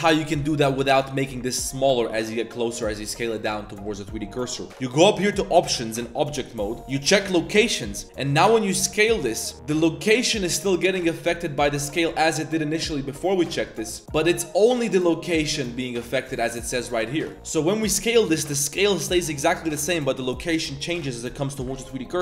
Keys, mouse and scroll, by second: 0.2 click, 0.6 z, 0.7 s, 5.6-8.0 drag, 8.2 drag, 8.7 s, 9.7 s, 12.1 z, 12.7 z, 13.4 click, 14.0 Tab, 14.0 1, 14.0 shift+s, 14.6-16.6 drag, 17.2 click, 17.3 s, 19.0-19.4 drag, 19.7 click.